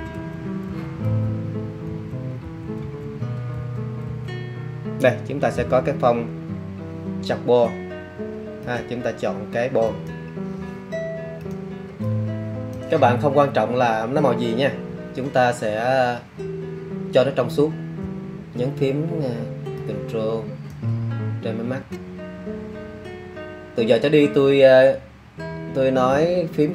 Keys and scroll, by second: 0.6 Down, 1.8 Page_Down, 2.7 Down, 3.5 Up, 4.0 Down.